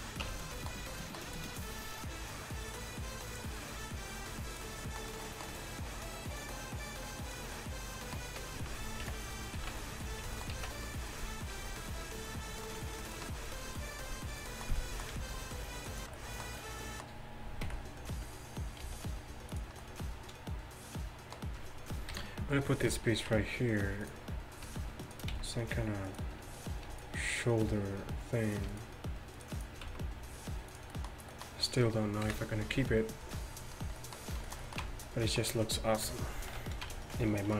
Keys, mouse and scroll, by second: 0.3 Tab, 4.9-6.4 middle drag, 6.4-7.7 drag, 7.8 middle drag, 9.1 KP_1, 9.6 z, 10.6 z, 11.6 g, 17.7 KP_1, 18.9 g, 22.2 KP_3, 23.4 Tab, 25.4 s, 28.6-31.0 right drag, 29.9 s, 31.0 click, 31.2 right click, 32.3 KP_1, 34.9 Tab, 36.1 KP_3, 36.9 Tab.